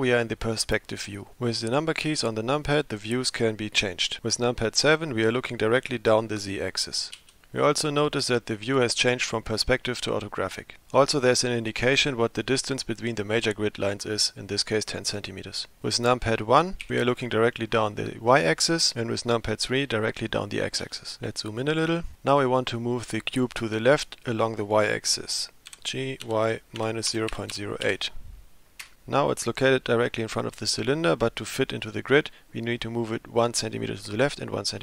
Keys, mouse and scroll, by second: 7.2 KP_7, 16.8 KP_1, 20.8 KP_3, 22.0 scroll up 2, 25.7 g.